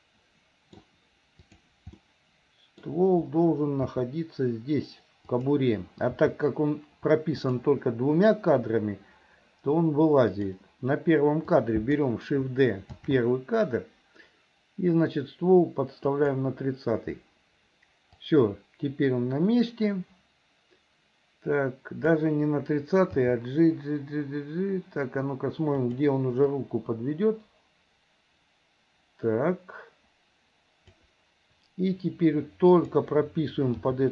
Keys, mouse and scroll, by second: 1.4 click, 2.0 middle click, 3.9 r, 6.2 g, 10.4 click, 11.5 click, 18.3-22.2 drag, 23.2 g, 26.6-31.1 drag, 32.7 click, 33.9 g.